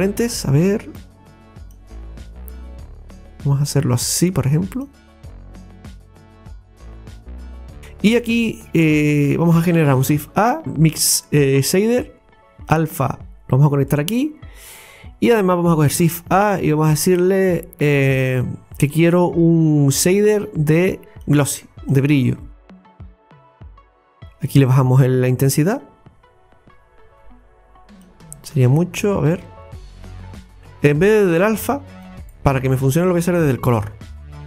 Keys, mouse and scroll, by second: 0.1-7.4 drag, 7.4 scroll down 2, 12.0 scroll down 1, 12.1-14.1 middle drag, 16.0 shift+a, 23.6 click, 25.9-30.6 drag.